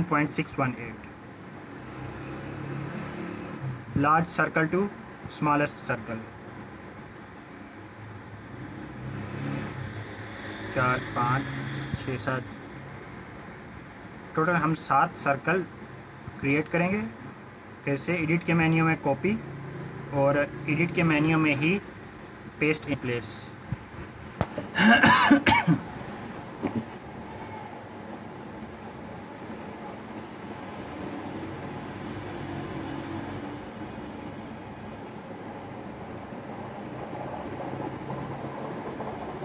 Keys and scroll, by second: 4.0-5.8 typing, 6.6 Return, 28.5-30.3 typing, 31.1 Return.